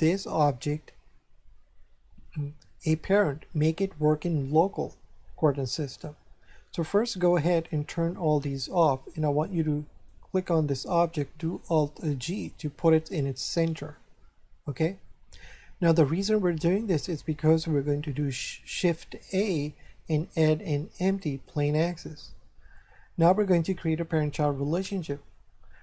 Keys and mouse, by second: 7.3 click, 8.5 click, 10.0 right click, 10.8 click, 12.2 alt+g, 13.0 shift+middle click, 15.0 shift+middle click, 19.1 shift+a, 21.7 click.